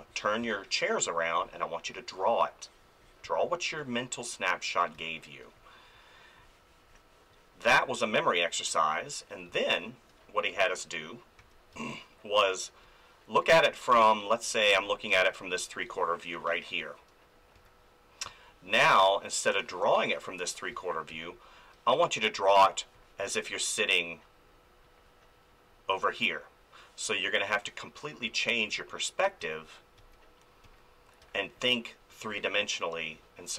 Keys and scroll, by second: 0.4 space, 3.2 space, 4.9 space, 9.5 space, 11.4 f, 11.7 space, 13.5 space, 17.5 ctrl+z, 18.2 space, 20.7 ctrl+z, 21.1 space, 28.3 ctrl+z, 31.2 space.